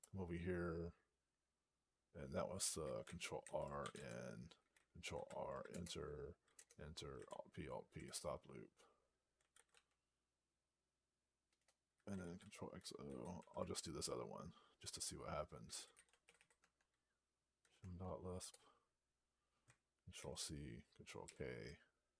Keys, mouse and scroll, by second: 3.3 ctrl+r, 3.7 i, 5.0 ctrl+r, 5.6 Return, 6.4 Return, 7.1 alt+p, 7.9 Return, 11.3 Return, 13.2 ctrl+f, 15.4-17.5 typing, 17.6 Tab, 18.4 Return, 21.1 ctrl+k.